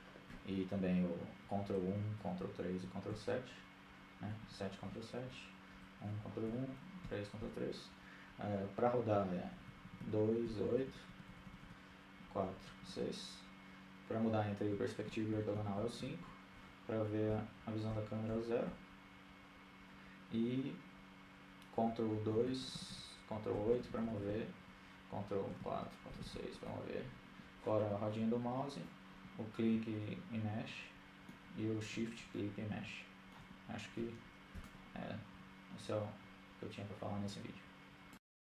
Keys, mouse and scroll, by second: 0.0-0.6 typing, 3.1 ctrl+KP_1, 4.0 ctrl+KP_3, 4.7 ctrl+KP_7, 6.3 KP_7, 7.6 KP_1, 8.3 ctrl+KP_1, 9.0 KP_3, 11.7-15.6 typing, 17.4-18.8 typing, 20.2 KP_0, 20.6 KP_0, 21.1 KP_0, 21.5 KP_0, 24.9-25.4 ctrl+KP_2, 25.6 ctrl+KP_2, 25.8 ctrl+KP_2, 26.5-27.0 ctrl+KP_8, 27.2 ctrl+KP_8, 28.3 ctrl+KP_4, 29.0 ctrl+KP_6, 29.2 ctrl+KP_6, 30.4-33.1 middle drag, 35.4-36.7 middle drag, 37.0 middle click, 37.9 shift+space.